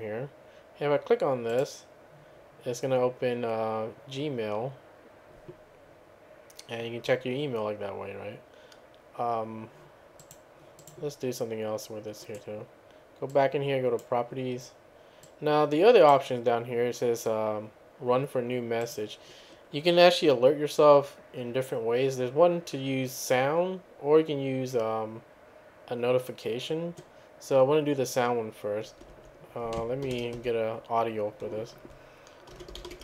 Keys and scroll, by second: 30.1 ctrl+a, 30.4 1, 32.3-33.0 typing.